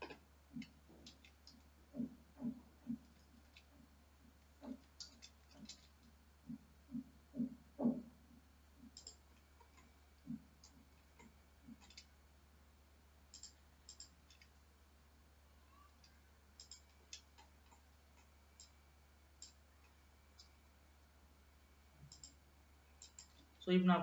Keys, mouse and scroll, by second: 1.2 shift+d, 1.7 y, 3.6 shift+x, 4.8 Escape, 5.2 g, 9.5-10.1 scroll down 4, 10.1-11.2 middle drag, 11.2 scroll up 1, 11.5-13.4 middle drag, 13.4 shift+click, 14.0 shift+click, 17.6 scroll up 2, 17.9 middle click, 18.9-20.1 drag, 20.1-20.6 scroll up 2, 20.6 g, 23.4 click, 23.6 space.